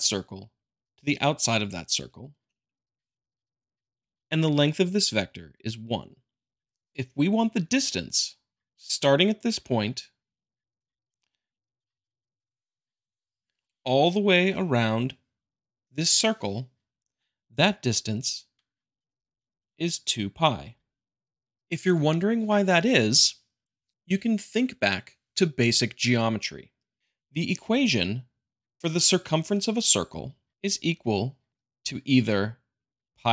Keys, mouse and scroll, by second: 3.0 click, 5.5-6.6 drag, 8.7-9.7 drag, 10.8 5, 11.4-12.5 drag, 18.6-19.6 drag, 20.1-21.2 drag, 30.5 click, 33.0 click.